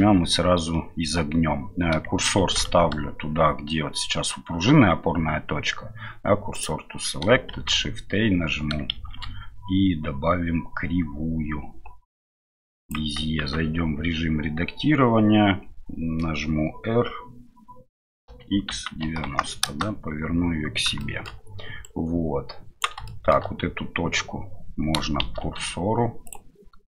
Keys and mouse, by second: 7.5 shift+a, 13.4 Tab, 18.2 r, 20.9 middle click, 21.8-22.9 right drag, 23.1 shift+middle click, 25.2 shift+s.